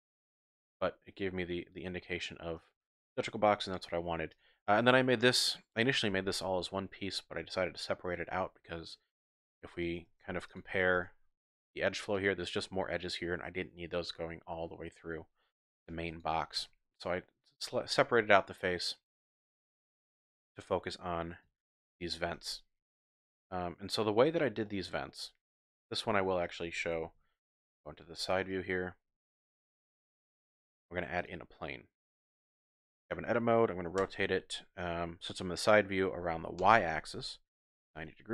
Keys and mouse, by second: 0.7 middle drag, 0.9 shift+click, 1.3-1.8 middle drag, 2.1-2.5 shift+drag, 4.3 click, 4.4 typing, 6.8-7.6 middle drag, 7.9-8.7 typing, 8.6 middle click, 10.0 Tab, 10.5 shift+click, 11.0 Tab, 12.2 click, 16.6 Tab, 19.5 click, 20.6 click, 22.4 Tab, 23.1-24.3 drag, 24.6 shift+click, 25.1 click, 26.3 Tab, 27.1 KP_3, 28.1 shift+drag, 29.6 shift+click, 30.3 shift+a, 32.2 Tab, 34.0 r, 36.6 y, 37.8 KP_9, 37.9 KP_0.